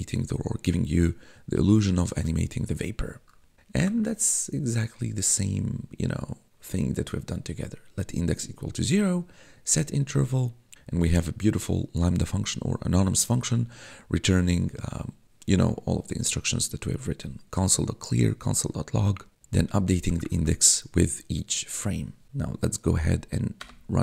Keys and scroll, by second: 3.9 1, 20.3 1, 23.5 Return.